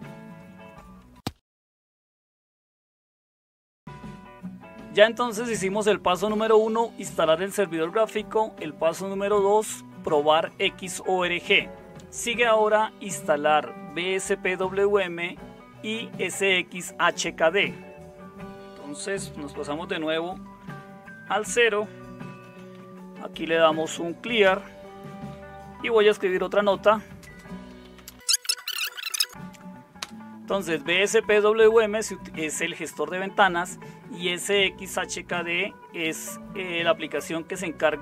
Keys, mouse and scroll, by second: 3.8 super+7, 20.2 super+0, 22.0-24.3 typing, 24.4 Return, 26.0-30.0 typing.